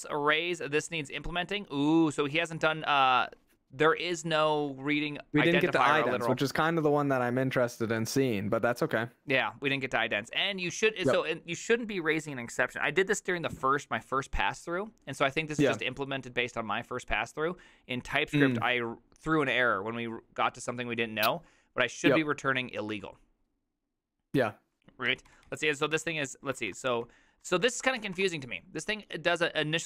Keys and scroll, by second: 2.8-5.3 typing, 6.4-7.5 typing, 8.5-10.9 typing, 21.3 typing, 22.9 typing, 25.1 ctrl+u, 25.3 ctrl+u, 25.5 ctrl+u, 26.0 ctrl+u, 26.6 ctrl+d, 26.9-28.7 typing.